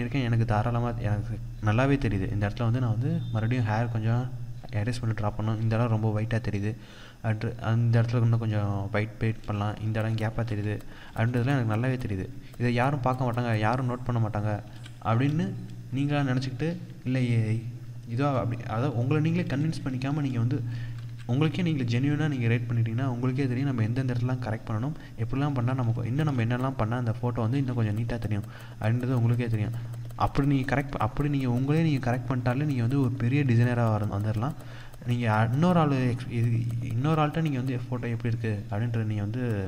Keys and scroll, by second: 9.4 ctrl+=, 18.0 ctrl+-, 19.3 ctrl+0, 20.4 ctrl+=, 23.9 ctrl+=, 24.9 ctrl+=, 25.8 ctrl+space.